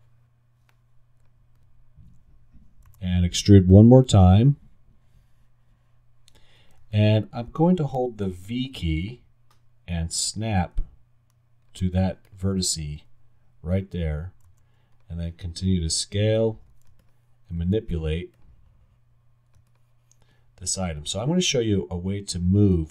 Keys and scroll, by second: 3.0 g, 8.5 alt+v, 14.5 alt+r, 17.8 alt+w.